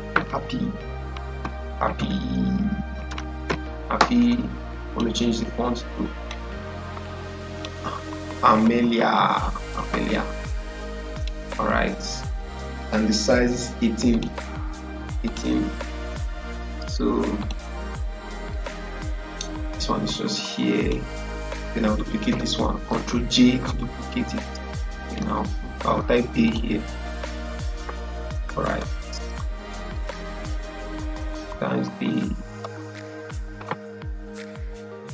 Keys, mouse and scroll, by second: 1.3-3.4 typing, 4.8 click, 7.8-9.8 typing, 11.0 click, 14.0-22.2 drag, 22.2 ctrl+j, 24.3-26.4 drag, 27.9 ctrl+a, 28.6 Delete, 29.3 BackSpace, 30.3 d, 31.5-31.8 typing.